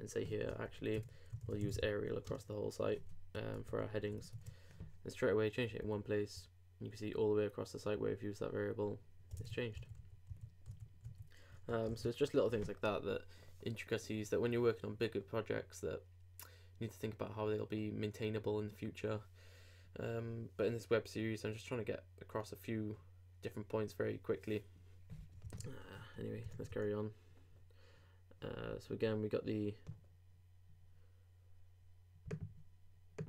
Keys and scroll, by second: 3.8 super+BackSpace, 4.0 super+s, 4.2 super+Tab, 5.8 super+r, 9.4 super+Tab, 9.8 super+z, 11.9 super+s, 25.5 super+Tab, 26.5 super+r.